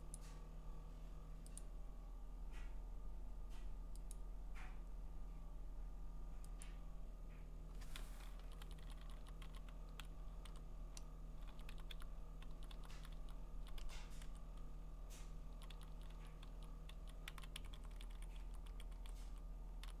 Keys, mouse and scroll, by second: 0.2 click, 1.6 click, 4.1 click, 6.7 click, 8.4 Down, 8.6 Down, 8.8 Down, 9.0 Down, 9.2 Down, 9.4 Down, 9.9 Down, 11.5 Down, 11.7 Down, 11.9 Down, 12.5 Down, 12.7 Down, 13.0 Down, 13.2 Down, 13.6 Down, 15.9 Down, 15.9 Up, 16.1 Down, 16.5 Down, 16.9 Down, 17.3 Down, 17.9 Up, 18.7 Up.